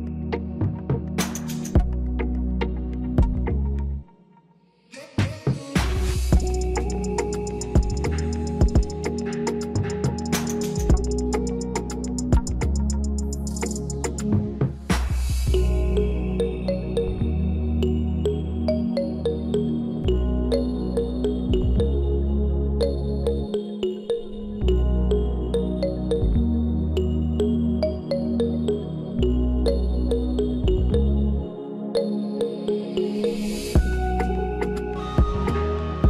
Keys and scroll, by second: 30.8 3.